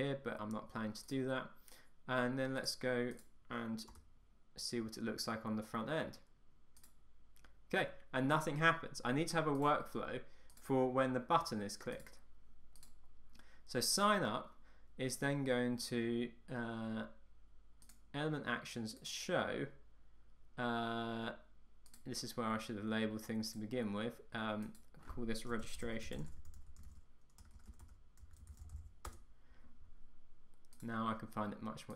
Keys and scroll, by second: 4.0 Return, 29.2 Return.